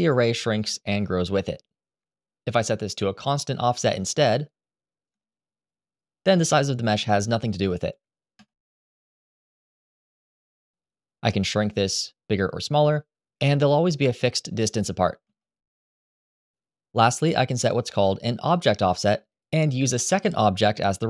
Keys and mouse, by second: 1.7 Escape, 2.0 Tab, 3.5 click, 5.0 click, 5.5 click, 6.4-9.1 shift+right drag, 9.7 Tab, 11.1 s, 14.1 Escape, 15.9 Tab, 17.8 click, 18.2 click, 19.1 click, 19.6 click.